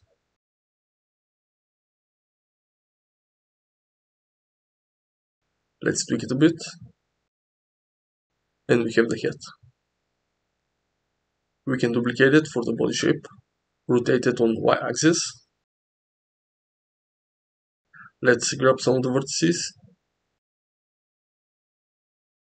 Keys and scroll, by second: 4.3 Tab, 5.8 1, 6.5 g, 8.7 Tab, 11.6-14.2 typing, 14.5 Return, 17.2 g, 17.6 z, 18.3 Tab, 19.4 g, 21.1 g.